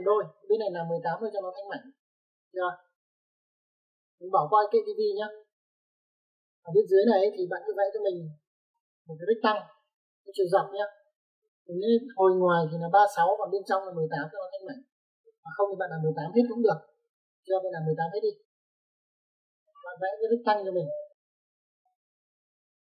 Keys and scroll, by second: 8.0 Escape.